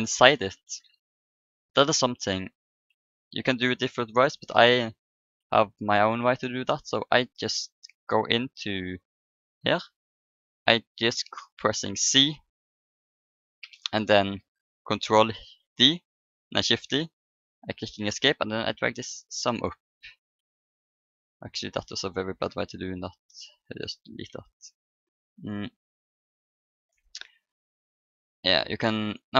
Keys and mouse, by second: 1.3-3.1 drag, 3.0-4.5 middle drag, 4.5 Tab, 6.2-9.9 middle drag, 6.2 a, 8.7-9.9 drag, 9.5 right click, 10.4 right click, 11.4 c, 15.2 shift+d, 17.6-20.6 drag, 20.6 middle click, 21.3 ctrl+z, 22.3 Delete, 24.5-26.4 middle drag, 26.4-28.6 drag, 28.6 middle click, 28.9-29.3 right drag.